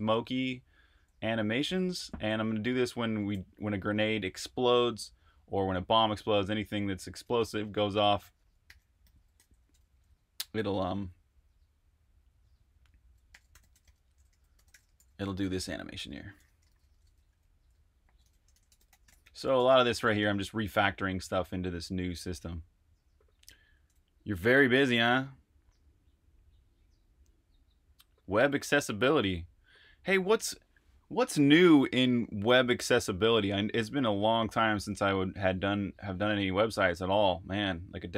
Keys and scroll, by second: 0.0-1.9 typing, 3.3-4.0 typing, 7.5-10.6 typing, 13.0-20.6 typing.